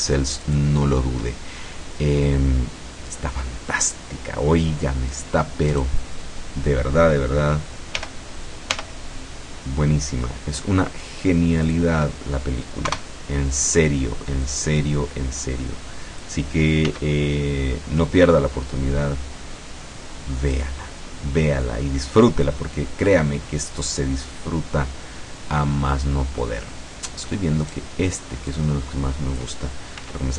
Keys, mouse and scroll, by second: 0.5 shift+click, 5.8 right click, 8.0 g, 8.8 y, 11.7 click, 12.9 KP_0, 14.5-16.5 drag, 16.9 s, 20.6 click, 26.7 middle click, 27.7 right click, 28.6-29.7 drag, 30.1 s.